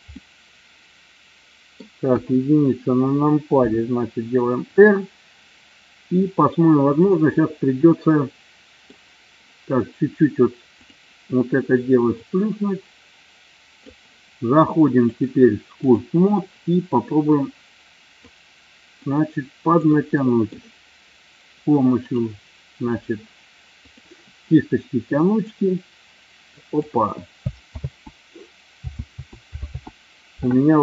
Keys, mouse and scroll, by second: 0.1 scroll up 1, 0.2-1.8 middle drag, 2.1 KP_1, 3.5 r, 4.7 click, 6.2 click, 7.3-8.8 middle drag, 12.3-13.9 drag, 15.2 click, 17.4-18.6 drag, 19.1-20.2 drag, 20.3 middle click, 25.6-26.8 drag, 27.7 ctrl+z, 28.9 ctrl+z, 29.6 ctrl+z.